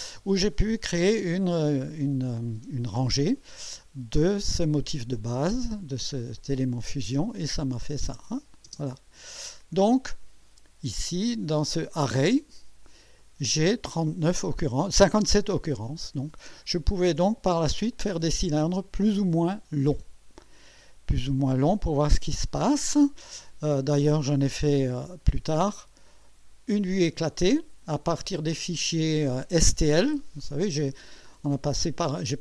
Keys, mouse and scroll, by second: 6.4 click, 7.1 click, 7.4 space, 8.2 click, 8.7 space, 9.6-10.1 scroll down 3, 11.9 click, 13.2-14.3 drag, 16.6-17.5 right drag, 26.0 click, 27.3-28.3 drag, 28.6 scroll up 1, 30.1-31.4 drag, 31.8-32.4 drag.